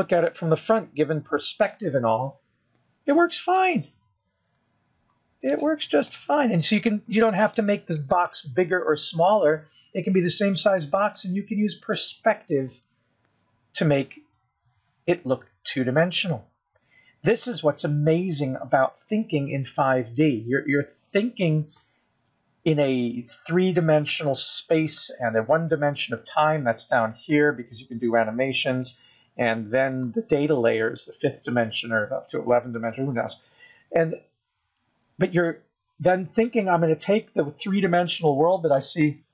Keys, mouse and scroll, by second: 1.0 middle click, 3.8 KP_0, 4.6 scroll up 1, 5.9 click, 7.7 g, 8.5 middle click, 10.4-10.8 scroll up 4, 11.3 scroll down 4, 11.7 middle click, 13.4-13.9 scroll up 6, 14.1 scroll down 2, 15.1 KP_0, 15.8 scroll up 1, 29.5 click.